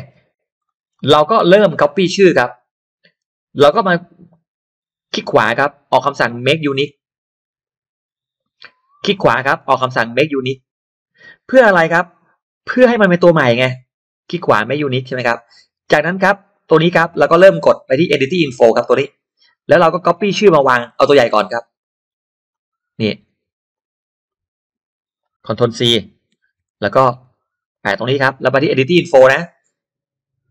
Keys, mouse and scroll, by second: 0.0-0.9 scroll up 4, 0.6 middle click, 1.1-1.4 scroll down 1, 2.6-3.0 scroll up 1, 5.2 right click, 7.6 click, 9.0 right click, 10.4 click, 13.1 right click, 14.7 click, 15.8 click, 18.5 click, 19.4-19.8 scroll down 1, 20.1 scroll up 1, 20.6 scroll down 1, 20.9-21.2 scroll up 1, 21.6 click, 21.8 click, 22.3 click, 22.5 click, 23.7-25.0 drag, 26.3 ctrl+c, 27.2 click, 27.6 click.